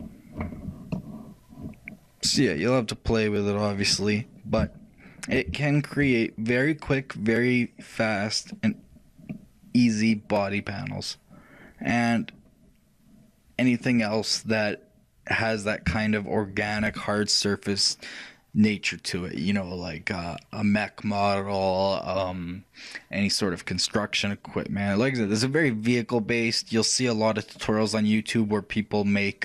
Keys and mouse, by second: 3.3-5.1 drag, 4.7-8.9 middle drag, 9.0-11.8 middle drag, 14.4-17.9 middle drag, 24.1-27.7 middle drag, 27.7 middle click.